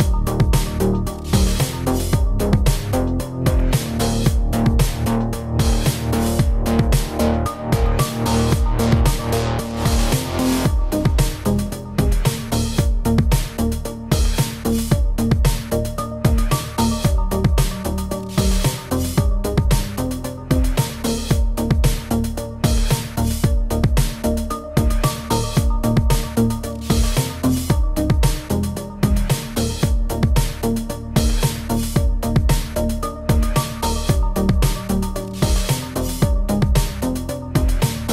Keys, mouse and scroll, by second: 0.0 middle click, 0.4 click, 1.2 scroll down 1, 1.3 middle click, 2.7 click, 2.9 click, 3.4 Tab, 3.4 click, 3.6 click, 4.0 shift+click, 4.2 click, 4.3 middle click, 4.7 g, 5.2 middle click, 5.6 ctrl+z, 5.6 middle click, 5.8 g, 6.0 middle click, 6.6 ctrl+z, 6.6 middle click, 6.8 middle click, 7.2 click, 7.3 click, 7.3 Tab, 7.5 click, 7.6 Tab, 7.8 middle click, 7.9 scroll up 2, 8.1 Tab, 8.3 shift+click, 8.4 shift+click, 8.7 ctrl+r, 9.4 click, 9.5 ctrl+r, 9.9 scroll down 1, 10.0 middle click, 10.2 middle click, 10.5 click, 10.9 click, 11.1 Tab, 11.2 click, 11.6 shift+click, 11.7 middle click, 11.8 g, 12.0 middle click, 12.3 g, 12.5 middle click, 12.9 click, 13.0 middle click, 13.5 ctrl+z, 13.5 ctrl+z, 13.6 ctrl+z, 13.7 middle click, 14.2 middle click, 14.4 shift+middle click, 14.6 shift+middle click, 14.7 click, 14.8 click, 14.9 middle click, 14.9 shift+middle click, 15.1 click, 15.3 Tab, 15.4 click, 15.5 Tab, 15.7 click, 16.0 click, 16.3 click, 16.5 click, 16.7 middle click, 16.7 shift+middle click, 16.9 scroll up 2, 16.9 shift+middle click, 17.1 click, 17.2 Tab, 17.2 click, 17.8 click, 18.3 click, 18.5 click, 18.7 click, 19.0-19.3 scroll down 2, 19.1 middle click, 19.4 click, 19.7-20.1 scroll up 2, 19.7 shift+middle click, 20.3 click, 20.6 click, 20.6 middle click, 20.7 Tab, 21.0 click, 21.1 middle click, 21.3 click, 21.4 scroll down 1, 21.5 g, 21.9 middle click, 22.1 shift+click, 22.2 middle click, 22.3 g, 22.5 middle click, 22.8 g, 23.1 middle click, 23.6 middle click, 23.9 Tab, 24.1 click, 24.5 click, 24.5 middle click, 24.8 shift+middle click, 24.9 middle click, 25.1 shift+middle click, 25.3 Tab, 25.3 middle click, 25.5 scroll up 3, 25.6 middle click, 25.8 middle click, 26.0 click, 26.4 click, 27.6 click, 27.8 click, 28.5 click, 28.7 Tab, 28.9 click, 29.1 click, 29.3 click, 29.4 click, 29.4 click, 29.6-32.6 typing, 29.8 click, 30.1 click, 30.2 click, 30.7 click, 31.3 click, 31.4 click, 31.7 click, 32.0 click, 32.0 click, 32.3 shift+middle click, 32.4 click, 32.5 click, 33.0 middle click, 33.2 click, 33.2 click, 33.5 click, 33.6 shift+s, 33.9 click, 34.1 shift+s, 34.7 click, 34.8 click, 34.8 shift+s, 35.1 click, 35.2 click, 35.2 shift+s, 35.5 shift+middle click, 35.5 middle click, 35.7 shift+middle click, 36.3 click, 36.8 middle click, 36.9 shift+middle click, 37.0 middle click, 37.3 click, 37.7 scroll up 1, 37.9 scroll down 1, 38.0 scroll down 1, 38.0-38.1 typing.